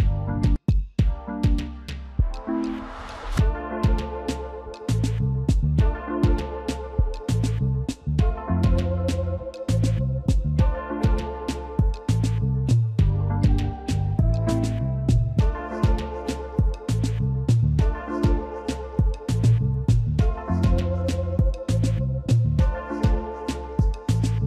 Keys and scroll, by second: 2.1 s, 2.1 space, 2.2 alt+Up, 3.7 d, 3.7 space, 3.7 z, 4.9 v, 6.5 shift+z, 9.7 space, 9.8 v, 12.1 shift+space, 14.6 space, 20.6 v.